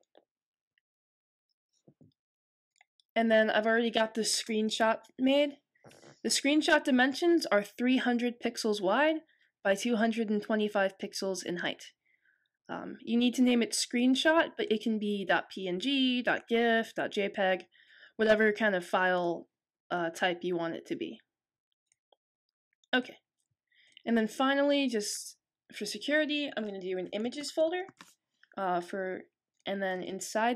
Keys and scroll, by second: 26.7-28.4 typing.